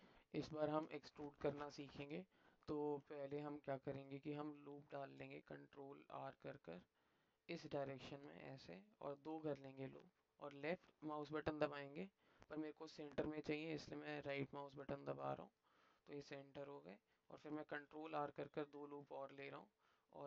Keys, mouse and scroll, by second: 0.2 middle click, 3.4 alt+middle click, 15.0 alt+click, 16.1 alt+click.